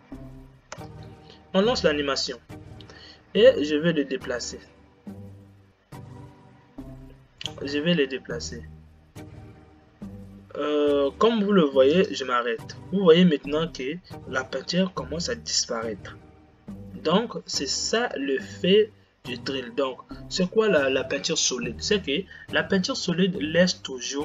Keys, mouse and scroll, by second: 1.2 space, 2.9 g, 18.4 space.